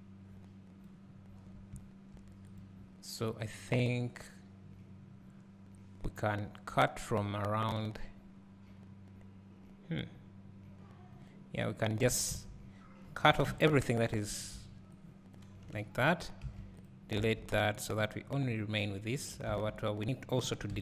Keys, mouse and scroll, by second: 14.4 b, 15.4 b, 16.9 x, 18.0 scroll up 2, 18.9-19.5 scroll down 1.